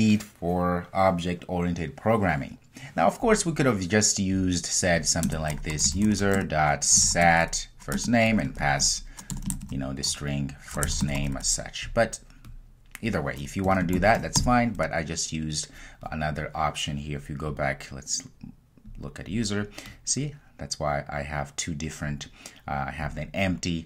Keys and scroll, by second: 8.0 Return.